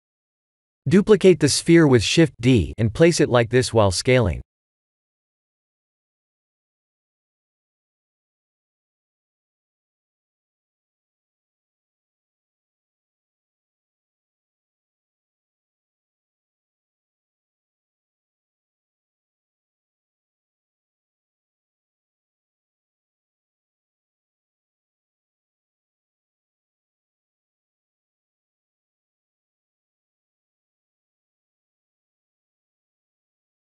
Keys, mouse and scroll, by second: 0.0 shift+middle click, 0.5 click, 1.4 KP_1, 2.1 shift+z, 3.1 shift+middle click, 6.1 g, 7.7 shift+z, 8.5 shift+z, 9.8 click, 12.7 g, 13.7 KP_3, 15.4 click, 16.7 KP_1, 17.3 shift+z, 18.3 middle click, 19.5 click, 21.1 middle click, 22.1 KP_1, 23.7 shift+d, 25.8 shift+d, 27.0 shift+d, 28.1 shift+d, 29.9 middle click, 31.2 click, 32.4 s, 33.2 middle click.